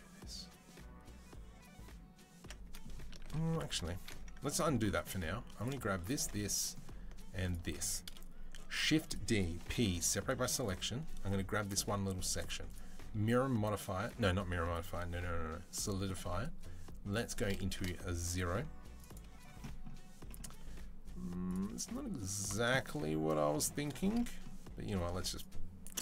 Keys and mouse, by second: 2.9-3.9 ctrl+drag, 3.1 ctrl+z, 3.3 ctrl+z, 3.4 ctrl+z, 3.5 ctrl+z, 3.7 ctrl+z, 3.9 middle click, 4.9 alt+click, 5.4 middle click, 6.0 shift+middle click, 7.5-10.4 shift+middle drag, 8.4 shift+d, 9.4 p, 10.1 Tab, 10.4 click, 10.4-12.2 middle drag, 12.2 click, 12.3 middle click, 12.6-22.3 drag, 22.3-25.2 middle drag, 25.2-26.0 drag.